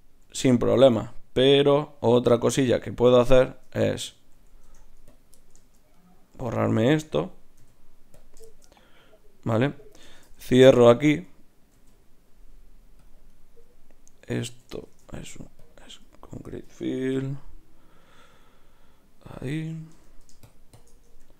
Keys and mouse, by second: 4.6 ctrl+Tab, 5.9-7.8 drag, 7.6 x, 11.7 ctrl+r, 14.8 shift+q, 17.1 F6, 19.9 Tab, 20.4 click, 21.0 Tab.